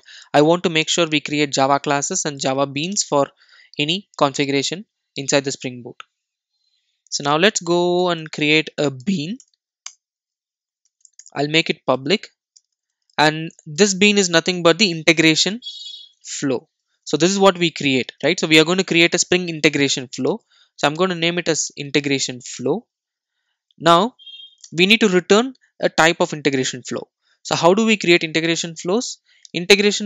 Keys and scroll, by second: 9.5 Return, 17.1 Return.